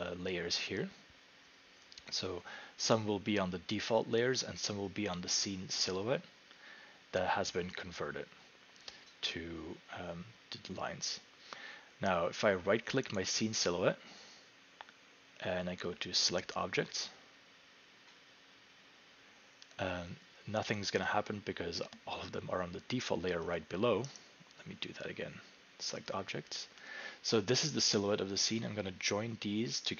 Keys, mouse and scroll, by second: 11.2 click, 13.2 right click, 16.2 right click, 17.0 right click, 17.1-20.1 drag, 23.5 click, 24.2 right click, 26.1 click.